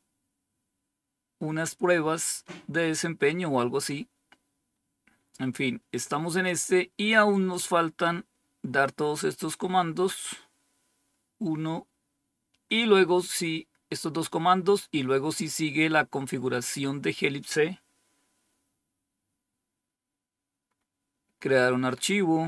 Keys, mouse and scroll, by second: 3.8-4.7 scroll down 2, 5.2-8.0 scroll down 1, 8.0-11.0 scroll down 1, 11.0-12.0 scroll down 1, 12.0-18.2 scroll down 1, 18.2-19.1 scroll down 2, 19.1-20.6 scroll down 2, 20.6-21.4 scroll up 3, 21.7-22.4 scroll down 2.